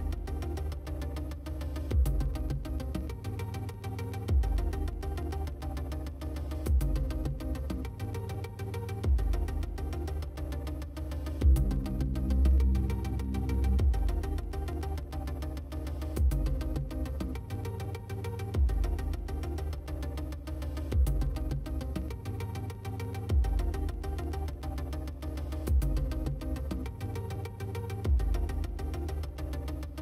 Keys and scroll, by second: 15.2-17.4 typing.